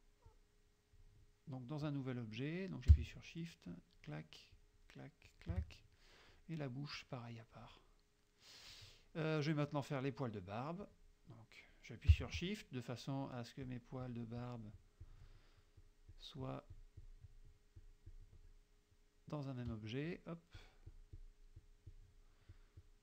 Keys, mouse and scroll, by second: 0.3 click, 3.8 shift+click, 4.6 shift+click, 5.3 shift+click, 5.9 shift+click, 7.0 click, 8.3 click, 10.9 click, 13.7 shift+click, 14.1 shift+click, 14.5 shift+click, 14.9 shift+click, 15.9 shift+click, 17.9 shift+click, 18.6 shift+click, 19.0 shift+click, 20.1 shift+click, 20.7 shift+click, 21.0 shift+click, 21.7 shift+click, 22.0 shift+click, 22.6 shift+click.